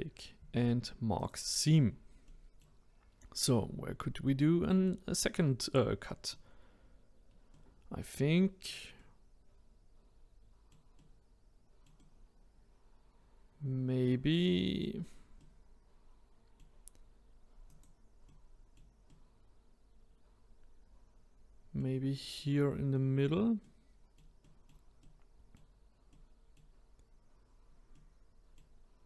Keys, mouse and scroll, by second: 1.8-2.2 scroll down 2, 2.2 middle click, 3.0-3.5 scroll up 1, 3.5-4.1 scroll down 1, 4.1-7.0 middle drag, 7.0-7.5 scroll up 1, 7.5-15.0 middle drag, 15.4-17.7 middle drag, 17.7 click, 18.2-22.0 middle drag, 23.6-27.4 middle drag, 27.4-27.9 scroll down 1, 27.9-29.0 middle drag.